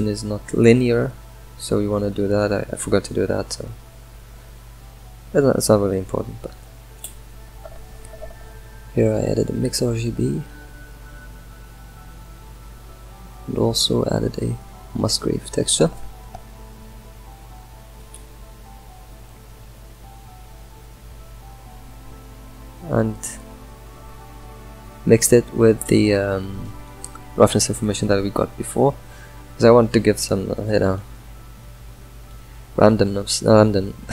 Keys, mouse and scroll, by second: 0.9 middle drag, 1.2-1.8 scroll up 5, 2.0 drag, 2.8 shift+d, 6.3 scroll down 1, 6.9 middle click, 7.3-8.0 scroll down 6, 8.0 middle click, 8.8 scroll up 2, 9.2 middle click, 11.0-13.3 middle drag, 13.3 shift+a, 19.7 Left, 20.9-22.1 scroll up 9, 21.6 middle drag, 22.6 click, 30.1-33.2 middle drag, 33.2 ctrl+shift+click.